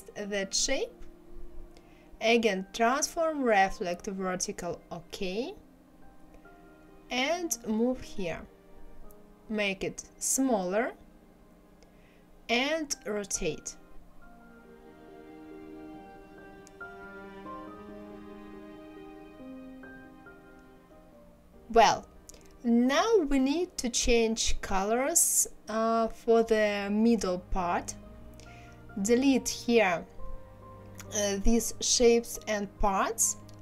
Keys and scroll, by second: 0.0 ctrl+c, 0.6 ctrl+v, 28.7 Delete.